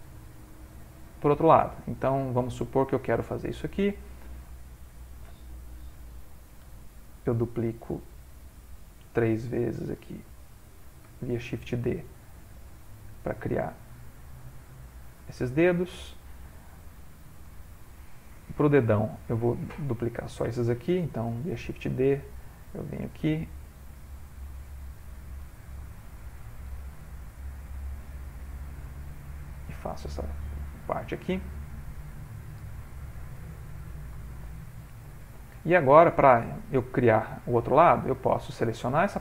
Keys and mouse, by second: 1.0 middle click, 1.3 middle click, 2.2 middle click, 3.8 click, 4.6 ctrl+middle click, 4.7 ctrl+middle click, 5.8 shift+d, 6.6 r, 8.3 g, 10.0 shift+d, 11.1 r, 12.1 g, 13.3 middle click, 17.1 click, 17.5 shift+click, 18.0 click, 18.5 middle click, 21.3 shift+d, 22.4 middle click, 22.9 middle click, 23.9 click, 24.6 g, 25.5 r, 26.8 r, 27.8 s, 28.9 s, 29.8 middle click, 31.0 click, 31.8 g, 32.6 r, 33.4 g, 34.2 ctrl+middle click, 34.8 ctrl+middle click, 35.0 shift+middle click, 35.2 shift+middle click, 36.3 ctrl+middle click, 38.0 click.